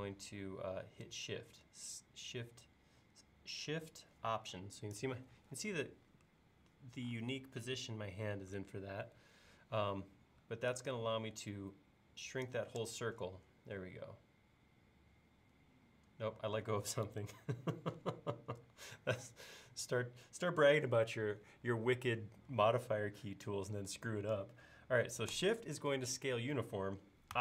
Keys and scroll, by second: 17.2 super+z.